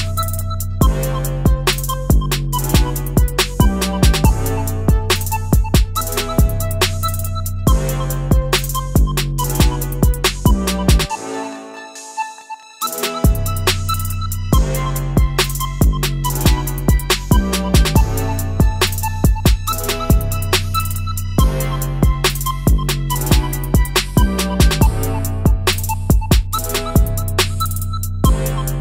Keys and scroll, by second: 0.4 ctrl+c, 1.3 ctrl+shift+v, 4.2 ctrl+c, 4.8 ctrl+shift+v.